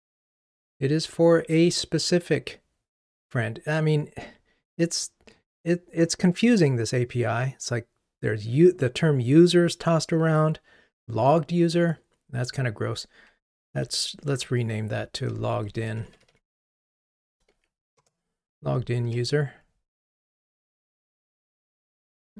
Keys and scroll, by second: 14.5 shift+F6, 19.1 ctrl+r.